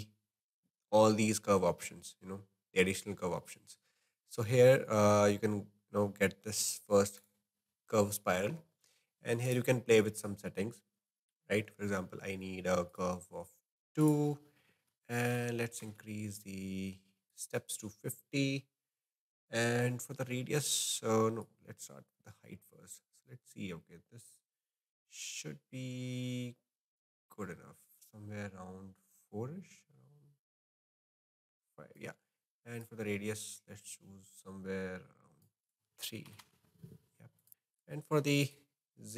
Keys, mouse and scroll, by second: 9.4-17.1 drag, 21.4-24.5 drag, 32.8-37.8 drag, 38.5-39.1 drag.